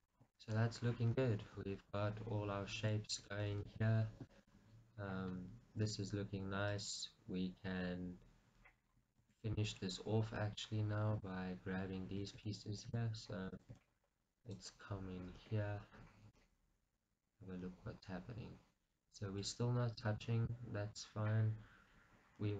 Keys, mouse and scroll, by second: 1.6 KP_1, 2.6-3.0 scroll down 1, 3.2-5.0 middle drag, 5.0-6.8 scroll up 2, 5.6-6.8 middle drag, 6.8 click, 8.9-9.3 scroll down 1, 9.3 shift+z, 9.7-13.6 shift+middle drag, 10.1 scroll up 1, 11.5 Tab, 13.0 shift+z, 13.6 click, 14.0 Tab, 14.6 click, 15.5 KP_Decimal, 16.4 middle click, 16.8-22.5 middle drag, 19.7-20.6 scroll up 2.